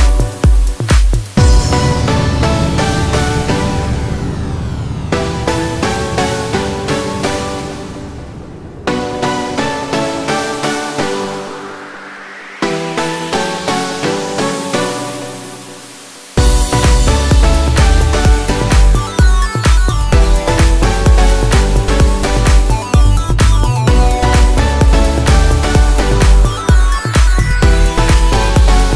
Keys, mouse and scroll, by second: 22.1 double click, 23.6 double click.